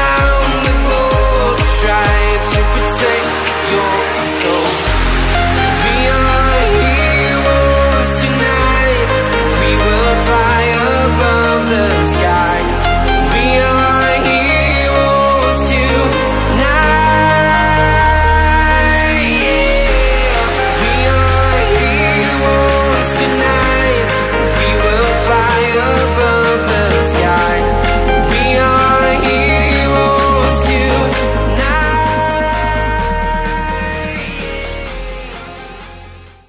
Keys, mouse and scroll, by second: 0.1 click, 0.6 alt+scroll down 1, 0.7-1.1 alt+scroll up 2, 1.6 click, 2.6 space, 2.7 click, 2.7 space, 3.1-3.4 scroll down 1, 3.4 click, 4.0 alt+scroll down 1, 4.1 space, 4.1 click, 6.5-8.3 typing, 7.3 click, 8.1 click, 9.7 alt+scroll up 2, 10.1-10.9 typing, 10.2 click, 10.4 click, 10.6 alt+scroll down 2, 10.8 click, 11.4 click, 11.6 right click, 12.0 click, 12.9 click, 14.6 click, 14.9-15.9 scroll up 1, 16.8 scroll down 1, 17.3-17.9 scroll up 1, 18.4 click, 21.3 click, 24.0 ctrl+0, 25.3 click.